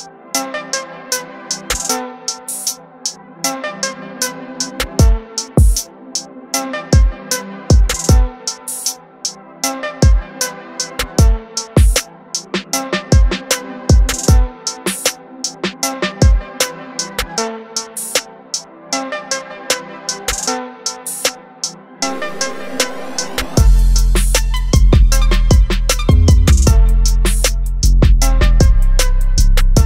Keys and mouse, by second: 0.0 click, 3.0 click, 5.4 click, 8.2 click, 12.9 click, 16.4 click, 25.0 click.